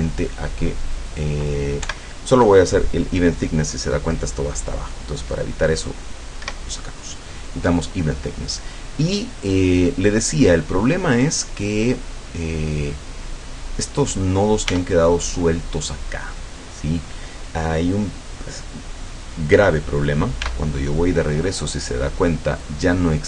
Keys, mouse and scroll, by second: 1.1 click, 1.9 F12, 5.8 click, 6.5 Escape, 11.6-12.1 scroll up 2, 12.3 scroll down 2, 13.0-14.1 middle drag, 14.2-14.6 scroll up 2, 14.7 Tab, 20.5 Tab.